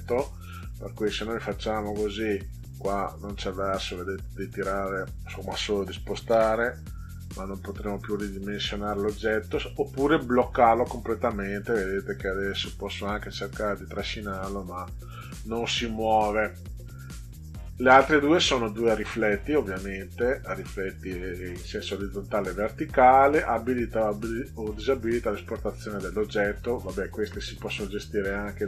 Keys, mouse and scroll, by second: 1.1 click, 2.4 click, 3.7 click, 6.2 ctrl+z, 10.1 click, 11.4 click, 11.8 click, 12.6 click, 13.0 click, 13.3 click, 13.6 click, 13.9 click, 14.2 click.